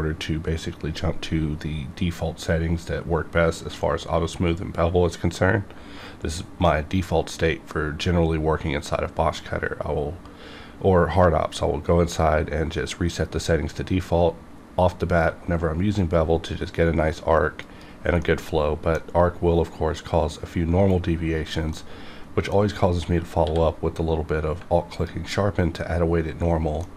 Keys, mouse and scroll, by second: 17.6 click, 18.2-21.3 middle drag, 21.8-23.6 middle drag, 23.4 q, 24.9 alt+click, 26.8-26.9 middle drag.